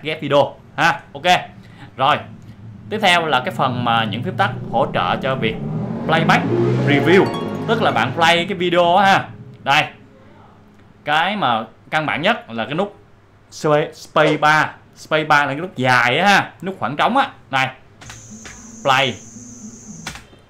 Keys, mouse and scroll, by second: 10.2-13.6 drag, 17.9 space, 20.0 space.